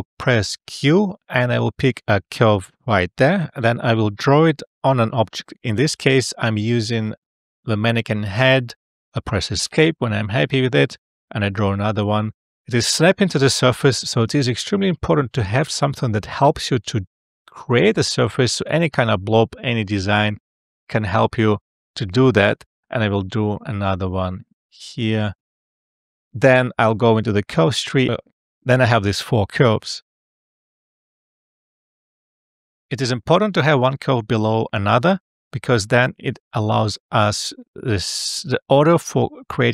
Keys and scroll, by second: 0.6 q, 9.6 Escape, 14.7 Escape, 19.0 Escape, 25.0 Escape, 31.4 alt+f.